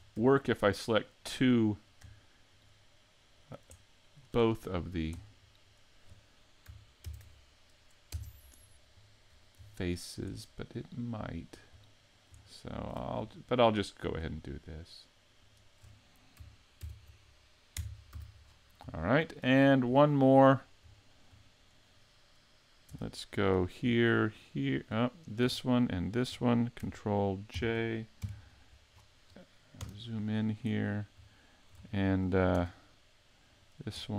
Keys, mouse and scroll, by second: 0.4 shift+middle click, 0.9 middle click, 1.5 middle click, 2.5 shift+right click, 3.3 shift+right click, 3.7 middle click, 4.4 shift+middle click, 5.1-6.5 scroll down 5, 7.1 ctrl+e, 9.3-9.7 scroll up 4, 9.7 shift+middle click, 10.3 middle click, 11.3 right click, 11.8 middle click, 12.4 shift+middle click, 13.8 middle click, 15.4 shift+right click, 16.8 ctrl+e, 18.1 a, 18.4 scroll down 6, 19.0 shift+middle click, 19.6-20.0 scroll up 3, 20.0 shift+middle click, 20.5 scroll up 2, 20.9 shift+middle click, 22.9 Tab, 23.3 right click, 23.5 shift+middle click, 24.3 shift+right click, 25.0 right click, 26.0 shift+right click, 27.5 ctrl+j, 28.2 KP_5, 28.9 scroll down 6, 29.8 KP_Decimal, 30.6 scroll up 4, 31.3 shift+middle click, 31.6 KP_5, 31.9 middle click, 32.5 Tab, 33.5 right click, 34.0 middle click.